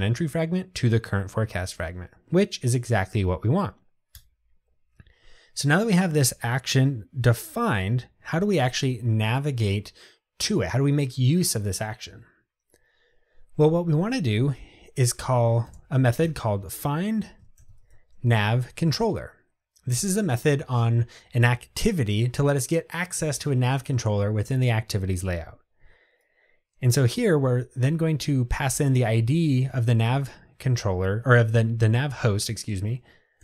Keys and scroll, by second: 18.5 Tab.